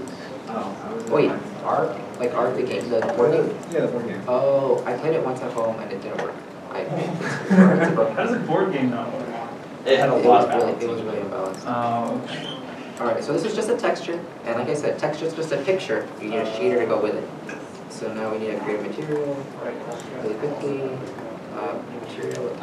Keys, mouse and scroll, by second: 0.5 alt+Tab, 9.0 alt+Tab, 12.5-13.1 scroll down 1, 21.1 right click.